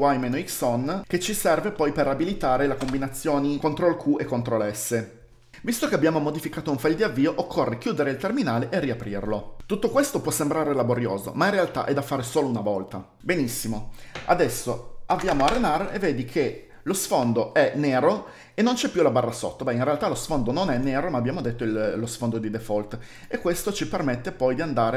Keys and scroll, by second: 4.7-5.9 typing, 6.1 ctrl+d, 7.2-8.3 typing, 12.0 F11, 14.6-15.4 typing.